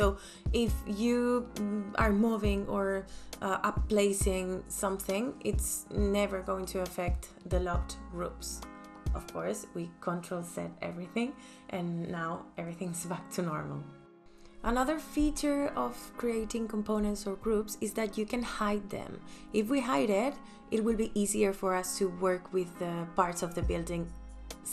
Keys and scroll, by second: 3.2 ctrl+z, 3.6 ctrl+z, 4.4 ctrl+z, 8.3 ctrl+z, 12.6 space.